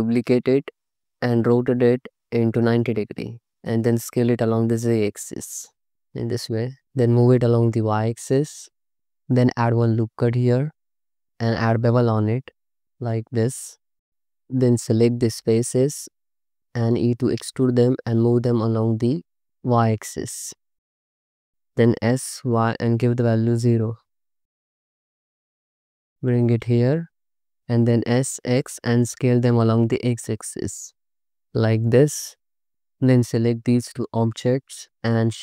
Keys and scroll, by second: 1.7 r, 3.6 s, 4.0 z, 9.3 Tab, 9.9 ctrl+r, 11.2 ctrl+b, 14.1 3, 17.5 e, 21.5 Escape, 21.9 s, 22.5 y, 23.3 0, 27.9 s, 28.4 x.